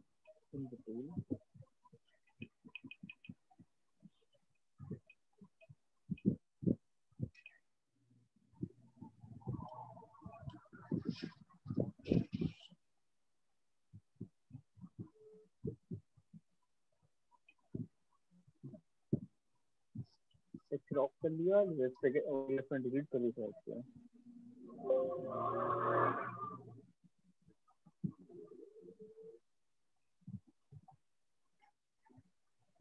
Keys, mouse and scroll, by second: 19.4 click, 20.9 click, 23.8 click, 24.0 click, 25.3 click.